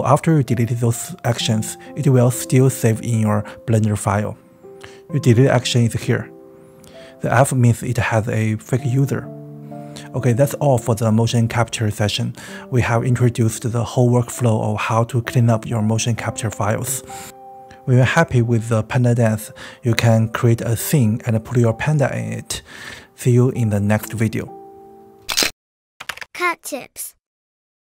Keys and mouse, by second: 0.8 Tab, 1.3 click, 1.8 x, 2.4 click, 2.7 x, 3.2 click, 3.6 x, 5.4-7.7 middle drag, 9.2-9.6 middle drag, 9.7 space, 22.9 space, 23.8 ctrl+s.